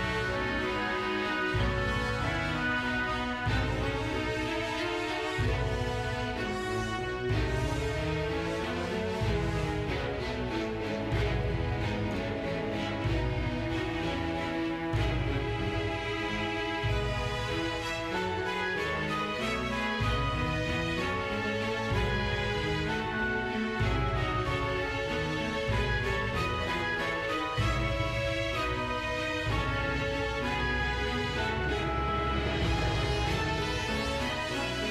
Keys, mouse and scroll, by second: 0.0 click, 0.4 scroll down 2, 0.6 middle click, 1.1 scroll down 1, 1.3 scroll up 1, 1.3-2.1 shift+middle drag, 2.2 scroll up 1, 2.3 shift+middle click, 2.6 middle click, 2.8 click, 3.2 shift+middle click, 3.3 scroll up 1, 3.4 shift+middle click, 3.6 r, 3.7 z, 4.3 click, 4.6 g, 5.1 click, 8.4 drag, 8.8-9.2 drag, 10.0 click, 10.9 a, 11.2 i, 11.7 drag, 12.3 space, 12.4 space, 12.5-13.0 drag, 13.0 space, 13.1 click, 13.9 i, 14.6-15.2 drag, 15.4 scroll up 2, 15.5-15.9 shift+middle drag, 16.1 click, 16.4 g, 17.7 click, 18.2 click, 19.3 i, 19.9-21.8 drag, 21.8 space, 22.1 space, 22.4-23.4 drag, 23.7-24.1 drag, 24.2 click, 26.2 click, 26.2 space, 26.7 space, 27.8 space, 31.1 space, 32.2 space.